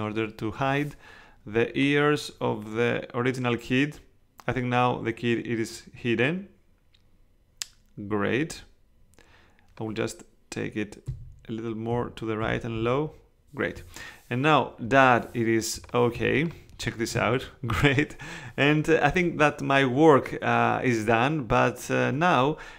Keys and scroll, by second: 11.1 Right, 11.9 Down, 12.4 Right, 12.7 Down, 16.1 space.